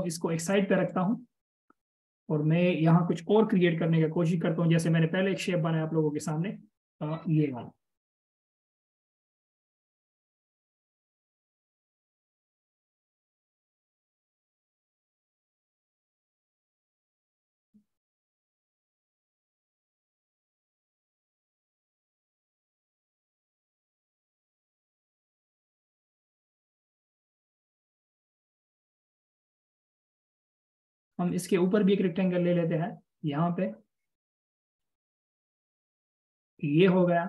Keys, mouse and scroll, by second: 2.4 double click, 3.8 BackSpace, 11.6 double click, 14.2 BackSpace.